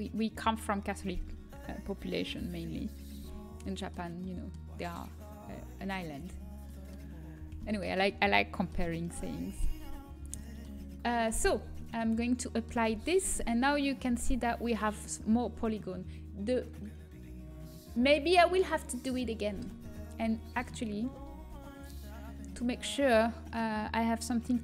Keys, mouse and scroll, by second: 3.6-7.0 middle drag, 11.8-13.7 drag, 13.2 Tab, 19.8 ctrl+z, 20.2 ctrl+z, 20.7-22.9 middle drag, 21.3 Tab, 24.0 click.